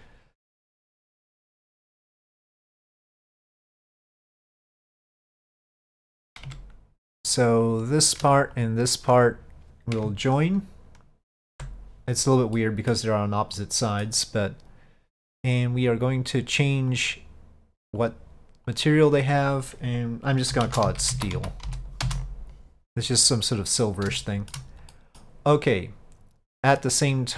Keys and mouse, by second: 0.9-2.5 middle drag, 5.8 click, 6.5 Tab, 7.3 click, 7.8-8.3 drag, 8.6 click, 11.5 ctrl+j, 12.6-13.0 middle drag, 13.6-14.1 middle drag, 17.0 click, 18.1 click, 18.8 click, 19.0-23.3 drag, 24.3-24.6 shift+middle drag, 25.0 middle click.